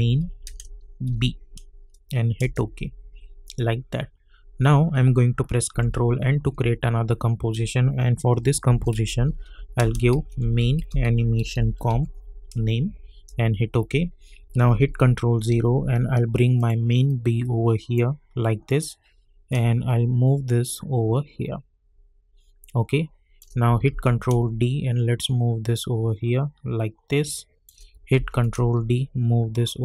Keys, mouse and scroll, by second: 0.0-1.0 typing, 2.4 Return, 4.9 ctrl+Return, 5.7 ctrl+n, 8.4-12.4 typing, 13.1 Return, 16.5-23.9 drag, 23.9 ctrl+d, 24.2-28.1 drag, 28.1 ctrl+d, 28.4-29.8 drag.